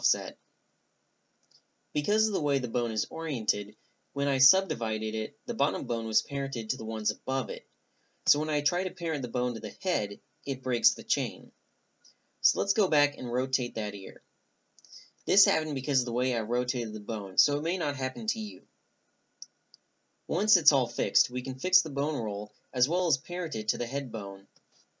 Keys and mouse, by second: 2.0 a, 2.6-4.4 drag, 2.7 g, 4.4 ctrl+z, 4.7 ctrl+z, 5.2 ctrl+z, 6.0 ctrl+z, 6.6 ctrl+z, 7.3-10.1 drag, 9.1 a, 9.5 g, 10.1-12.4 right drag, 12.9 click, 13.2-14.3 right drag, 14.0 s, 15.9 middle click, 16.1 r, 16.8 middle click, 17.3 r, 17.9-18.5 middle drag, 18.8 click, 18.8-22.5 typing, 19.5 click, 20.1 click, 20.7 ctrl+p, 21.3 click, 22.4 middle click, 22.6 click, 23.2 ctrl+n.